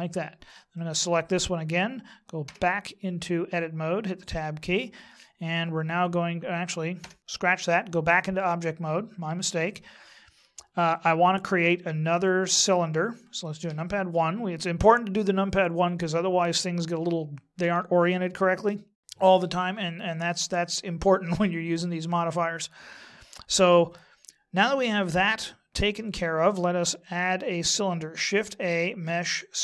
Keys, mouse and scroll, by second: 0.7 right click, 2.5 Tab, 7.0 Tab, 13.6 KP_1, 28.5 shift+a.